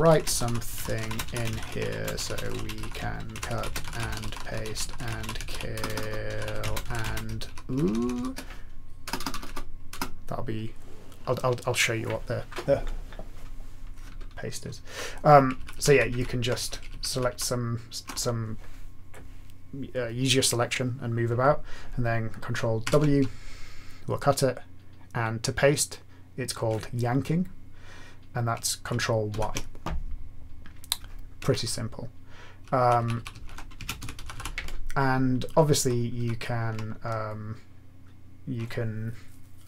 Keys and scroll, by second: 0.0-10.4 typing, 15.6 ctrl+Left, 15.7 ctrl+Left, 15.9 ctrl+Left, 16.1 ctrl+Left, 16.9 ctrl+shift+Left, 17.1 ctrl+shift+Left, 17.3 ctrl+shift+Left, 22.8 ctrl+w, 29.3 ctrl+y, 31.7 Right, 32.2 Right, 32.2-32.7 Right, 33.1 Right, 33.3 Right, 33.7-34.8 typing, 36.1 ctrl+a.